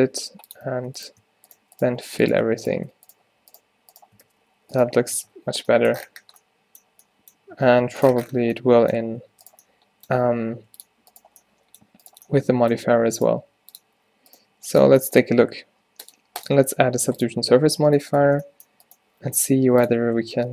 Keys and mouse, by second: 0.2 g, 2.5 f, 4.3 f, 5.1 f, 5.2 Tab, 7.7 Tab, 9.1 Tab, 9.4 Tab, 10.2 g, 12.5-16.1 middle drag, 13.4 g, 14.5 g, 15.0 Tab, 16.1-17.3 drag, 17.9 Tab, 18.3 Tab, 19.0 click, 20.3 Tab.